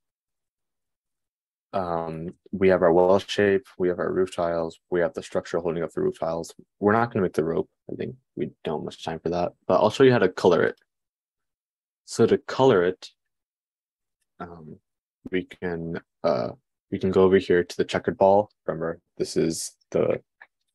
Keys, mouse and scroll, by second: 0.1-11.3 middle drag, 11.3 click, 11.5-20.7 middle drag.